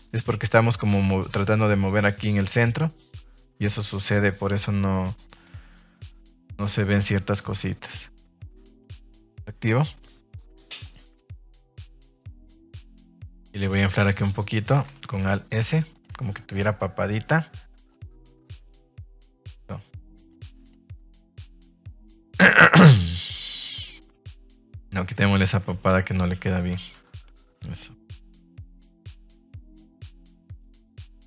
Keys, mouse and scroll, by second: 0.7 click, 4.0 middle click, 4.6 middle click, 5.3 shift+middle click, 5.8 middle click, 6.3 middle click, 6.8 middle click, 8.9-11.0 drag, 11.4 Tab, 11.6 middle click, 11.9 middle click, 12.3 shift+middle click, 12.8 middle click, 14.0 right click, 14.3 shift+right click, 14.6 shift+right click, 15.0 alt+s, 15.9 click, 16.1 Tab, 16.3-17.8 middle drag, 18.4 middle click, 20.2 click, 21.4 middle click, 22.0-22.4 middle drag, 22.5 shift+middle drag, 23.1-23.4 middle drag, 23.8-24.2 middle drag, 24.4 middle click, 24.8 ctrl+z, 25.5 ctrl+z, 26.9 Tab, 27.4 middle click, 27.9-28.4 middle drag, 28.7-29.6 middle drag, 30.1 middle drag, 30.8 shift+middle click, 31.1 middle click.